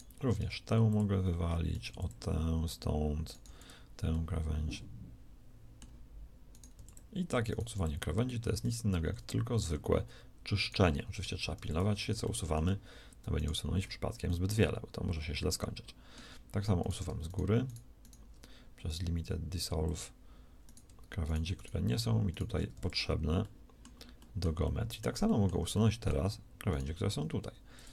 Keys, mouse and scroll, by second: 0.4 x, 6.4 right click, 6.7 x, 7.6 x, 9.0 x, 12.4 x, 15.2 middle click, 16.7-18.8 right drag, 18.8 x, 27.1 x.